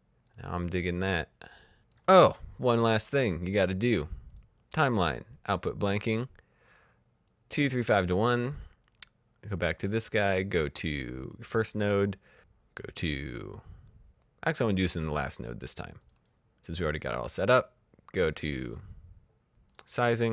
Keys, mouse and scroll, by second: 0.0 click, 4.2 click, 7.2 click, 9.6 click, 14.7 click, 17.9 click, 19.6 click.